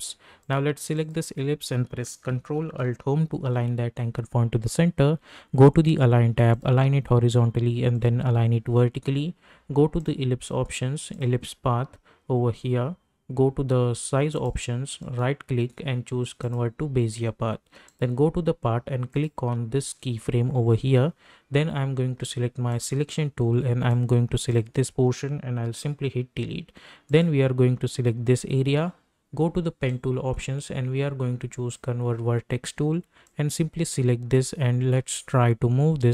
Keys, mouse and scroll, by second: 3.3 ctrl+alt+Home, 6.5 click, 14.3 click, 15.0 right click, 16.4 click, 22.8-26.7 drag, 27.0 click, 27.9 scroll up 1, 29.8-36.1 drag.